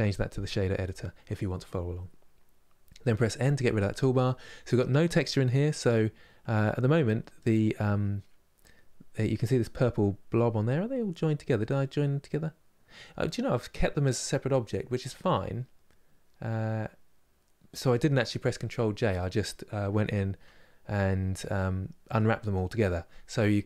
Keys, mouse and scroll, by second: 3.1 n, 5.6-6.7 middle drag, 6.7-10.0 scroll up 3, 10.0-13.0 middle drag, 19.7 Tab, 20.6-23.6 middle drag.